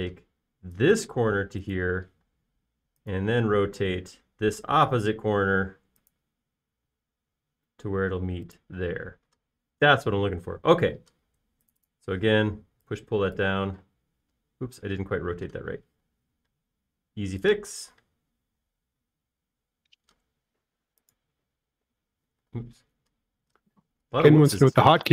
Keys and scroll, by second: 0.6 m, 3.4 q, 11.7 space, 13.2 p, 14.9 typing, 17.1 q, 23.8 space, 24.9 q.